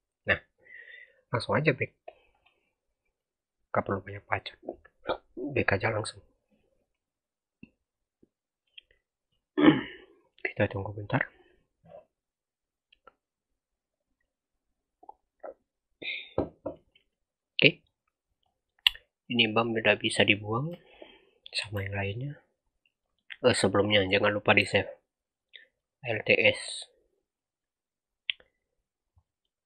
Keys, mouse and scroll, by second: 0.1 click, 1.6 click, 16.7 scroll up 2, 17.7-18.3 scroll down 5, 18.3-19.3 middle drag, 19.3 click, 19.7 scroll down 3, 19.8-20.4 middle drag, 20.4-21.0 scroll down 1, 21.0 shift+click, 21.7 x, 22.2-22.9 scroll up 5, 22.9 middle click, 23.1-24.8 scroll up 4, 24.8 alt+s, 25.6 middle click, 26.0-27.3 scroll up 3, 27.3 click, 29.1-29.4 middle drag, 29.4-29.6 scroll up 3.